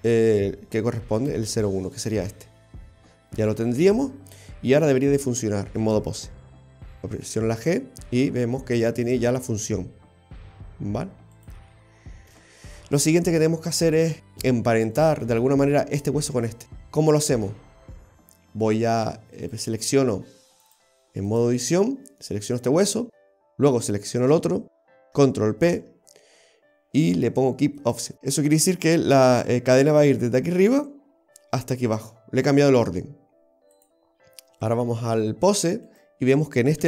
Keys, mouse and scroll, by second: 5.0 right click, 7.3 g, 12.4 ctrl+z, 19.4 right click, 20.7 click, 23.3 shift+right click, 25.7 ctrl+p, 33.8 click, 35.9 right click.